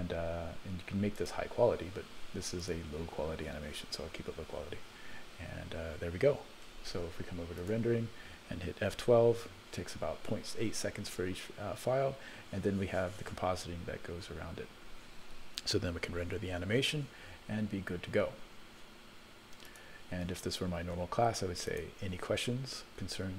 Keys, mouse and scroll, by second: 1.2-2.3 drag, 2.7 click, 4.7-5.7 scroll down 9, 5.7 scroll up 3, 6.6 ctrl+s, 7.6 click, 9.1 F12, 19.7 click, 21.8 click.